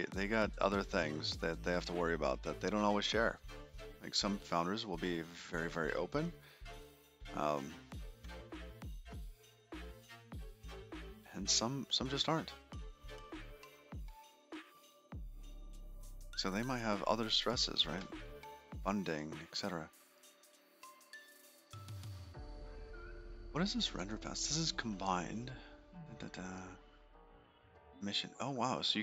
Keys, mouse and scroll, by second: 5.3 middle click, 7.6 middle click, 8.3 shift+middle click, 13.9 middle click, 17.1 click.